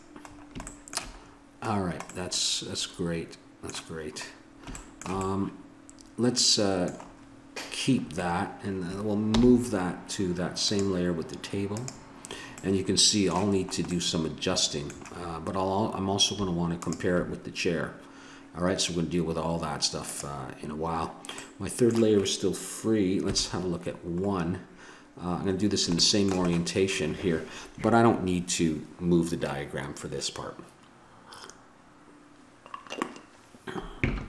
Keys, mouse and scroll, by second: 9.3 m, 11.7-12.7 drag, 12.7 middle click, 14.5-16.6 middle drag, 16.8-19.9 drag, 20.0-21.4 drag, 21.4-23.2 middle drag, 23.2 KP_1, 24.2-25.3 scroll up 1, 25.3 scroll up 1, 25.4-30.6 middle drag.